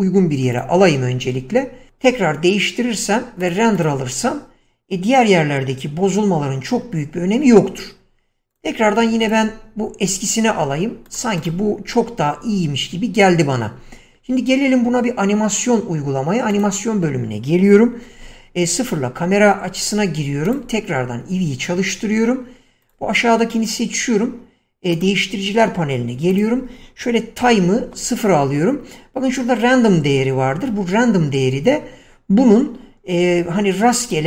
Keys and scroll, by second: 7.8 Escape, 13.5 Escape, 18.5 0, 27.7 0, 28.1 Return.